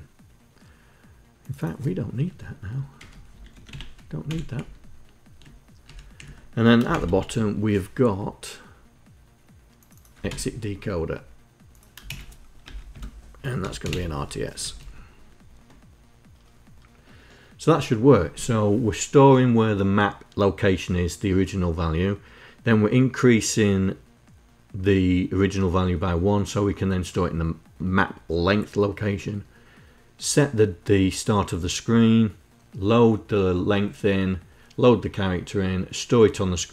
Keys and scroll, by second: 2.5 Home, 3.0 shift+End, 3.3 Delete, 3.8 Delete, 4.1 Down, 5.4 Up, 5.7 Down, 6.4 shift+;, 9.8 ctrl+Insert, 11.6 shift+Insert, 12.1 Return, 12.4 Tab, 12.9-13.9 typing, 14.2 Up.